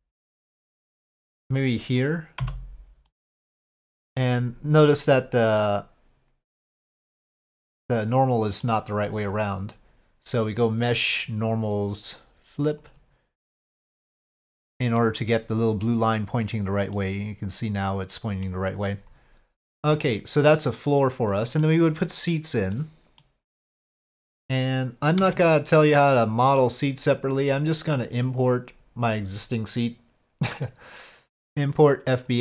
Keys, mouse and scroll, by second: 0.2 3, 0.2 2, 0.7 alt+click, 2.4 f, 3.1 middle click, 5.6-8.6 middle drag, 10.4-12.9 drag, 13.5-15.0 middle drag, 16.9-18.4 middle drag, 19.9-21.6 middle drag, 22.7 middle click, 25.2 Tab, 25.7-26.6 middle drag, 28.4-32.4 drag.